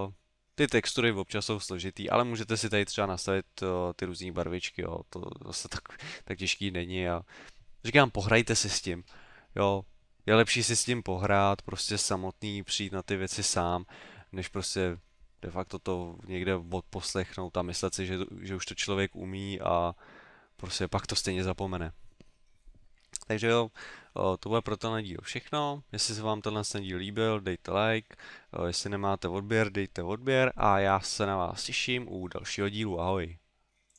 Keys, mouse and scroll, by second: 2.5 click.